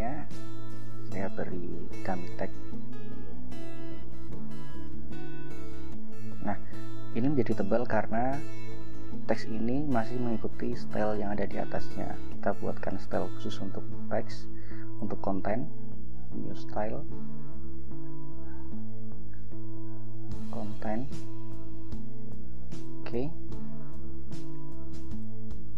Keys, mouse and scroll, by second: 1.3 click, 2.3 ctrl+click, 2.7 ctrl+a, 3.6 ctrl+c, 4.4 click, 5.4 ctrl+v, 8.5-10.3 drag, 13.1 click, 15.1 click, 17.6 click, 19.7-21.8 typing, 22.9 click, 25.3 click.